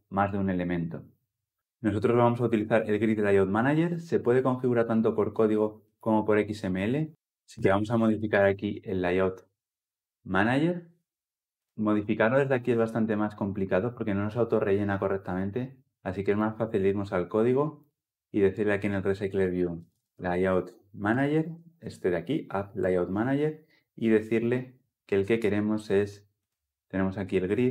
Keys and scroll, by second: 7.1 ctrl+a, 22.6 Return.